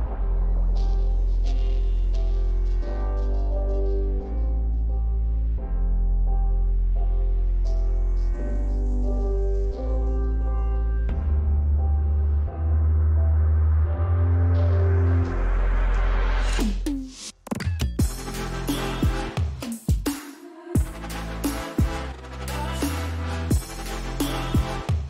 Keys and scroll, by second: 1.5 ctrl+j, 3.3 ctrl+t, 5.6 ctrl+j, 6.2 ctrl+t, 9.3 ctrl+j, 10.1 ctrl+t, 19.8 2.